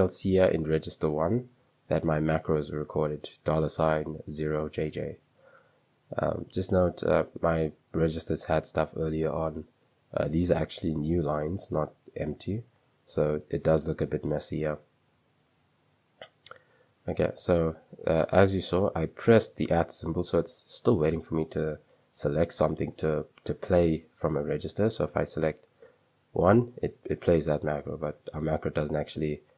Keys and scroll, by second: 0.0-0.3 typing, 25.9 1, 27.9-28.8 typing.